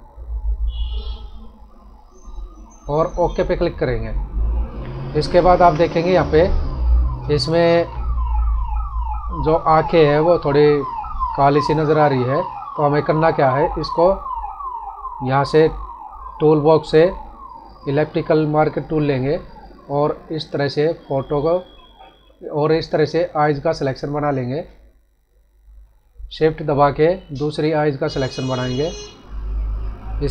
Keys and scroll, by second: 5.2 ctrl+=, 6.1 space, 22.9 space.